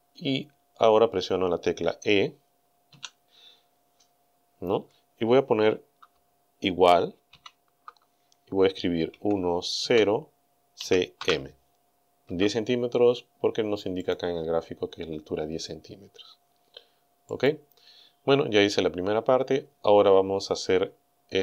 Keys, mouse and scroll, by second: 2.9 e, 7.3 shift+0, 9.2 KP_1, 9.9 KP_0, 10.8 c, 11.2 m, 12.3 Return, 14.0 click, 17.3 click.